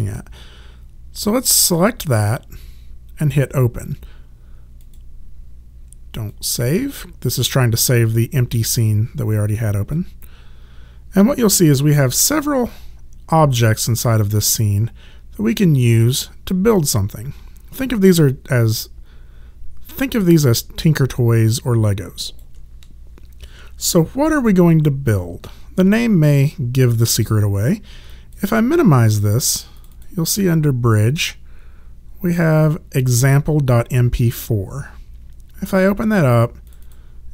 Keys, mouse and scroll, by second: 1.7 click, 4.8 click, 12.7 alt+click, 28.1 click, 36.7 click.